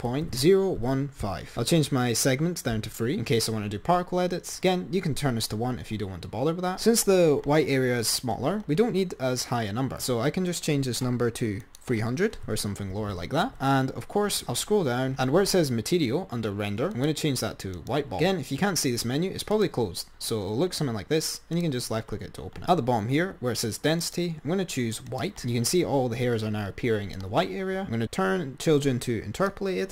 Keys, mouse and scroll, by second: 1.6-3.0 drag, 11.9-13.4 drag, 13.4 0, 14.6-16.2 scroll down 9, 17.0-18.0 drag, 19.7-22.7 drag, 22.7-24.0 scroll down 10, 24.3 click, 27.9-29.1 scroll up 10, 29.8 click.